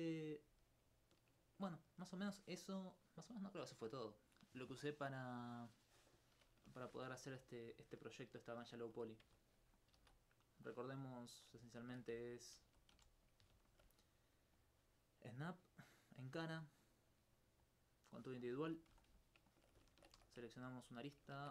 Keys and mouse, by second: 0.6 alt+click, 9.2 Tab, 9.8 click, 10.0 shift+a, 11.4 click, 11.8 ctrl+alt+click, 12.5 click, 12.6 g, 12.9 z, 13.2 click, 13.7 alt+click, 18.4 alt+c, 19.4 alt+c, 19.6 alt+click, 19.9 ctrl+Tab, 20.2 ctrl+2, 20.5 right click, 20.8 alt+click, 21.4 ctrl+Tab.